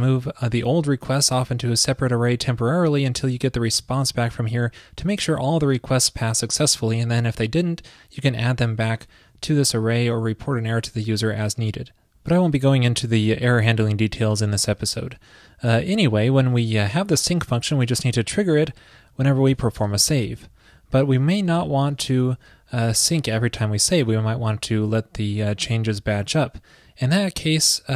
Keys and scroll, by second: 0.0 shift+super+Left, 3.9 shift+super+Right, 19.1 super+Right, 23.0 alt+super+Left.